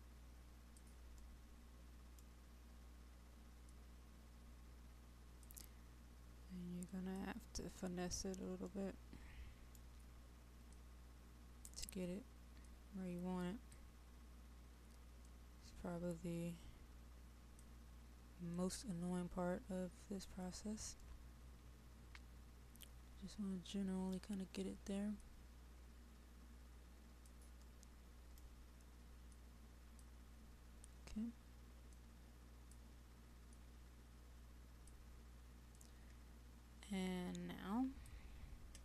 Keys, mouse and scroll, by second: 1.3-3.1 right drag, 3.7-6.3 drag, 8.6 right click, 10.8-20.6 drag, 21.0-24.8 right drag, 25.2-27.7 drag, 27.7-28.8 right drag, 29.4-38.8 drag.